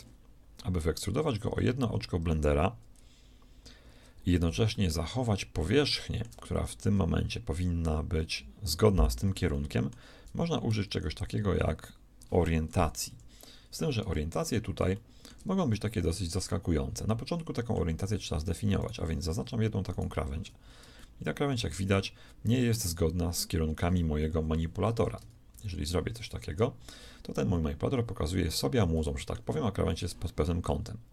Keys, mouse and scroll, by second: 0.7-6.6 middle drag, 9.5-11.3 drag, 13.0 ctrl+KP_3, 14.5 ctrl+KP_3, 14.7-17.7 shift+middle drag, 18.7 right click, 21.1 click, 21.1-22.1 middle drag, 21.1 right click, 24.3 KP_1, 24.9 KP_3, 25.5 ctrl+KP_3, 27.8-30.9 middle drag.